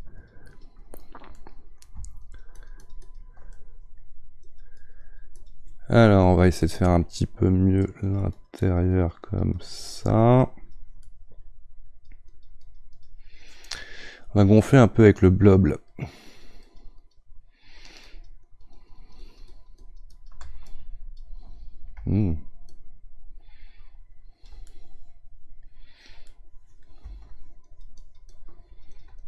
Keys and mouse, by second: 1.3 middle click, 2.2-3.5 ctrl+drag, 3.5 middle click, 4.4-11.0 drag, 11.0 middle click, 11.9-24.6 drag, 24.6-27.7 middle drag, 27.7-29.2 shift+drag.